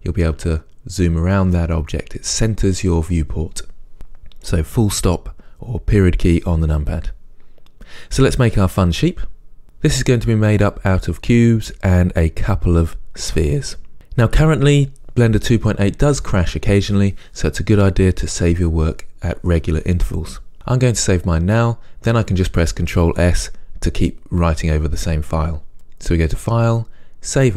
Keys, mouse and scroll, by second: 11.0-25.7 middle drag, 25.7 click.